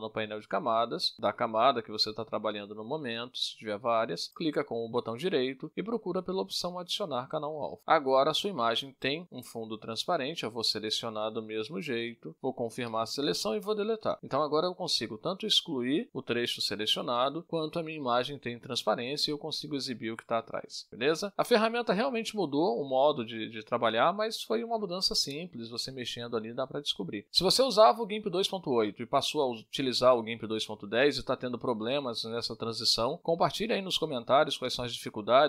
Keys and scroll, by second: 11.9 Return, 13.0 Delete.